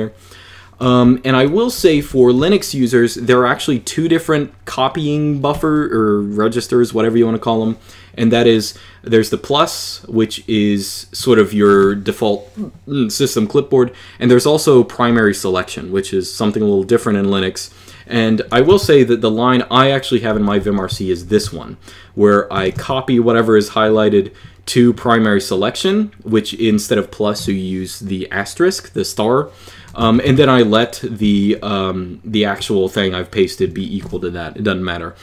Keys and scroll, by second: 0.8-1.9 typing, 18.6 Escape, 20.1 j, 20.4 k, 21.0 shift+v, 22.4 Escape, 22.6 Escape, 29.9 Escape, 30.1 Escape.